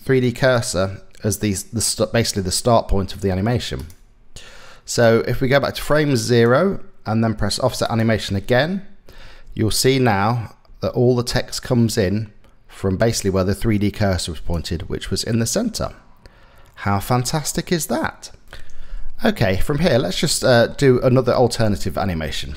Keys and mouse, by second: 3.4 click, 5.4 click, 8.8 space, 10.3 space, 11.3-14.1 drag, 14.5 space, 16.6 space, 19.9 click, 20.7 shift+click, 20.9 shift+middle click, 22.3 click.